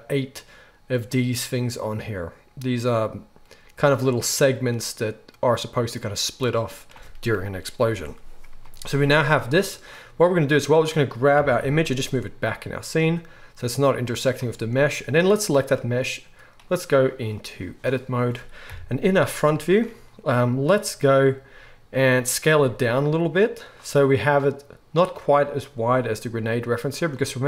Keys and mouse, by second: 10.6-14.2 middle drag, 11.3 g, 14.2 click, 14.3-16.5 middle drag, 16.5-23.7 drag, 18.7 KP_1, 22.5 s, 23.7-27.4 middle drag.